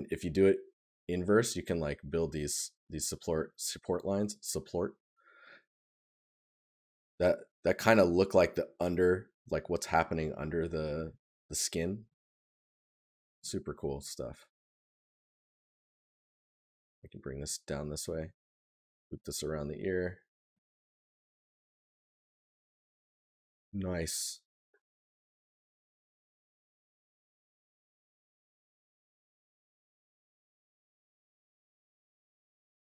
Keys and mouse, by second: 3.1 right click, 10.3 right click, 22.8 right click, 25.7 right click, 32.3 right click.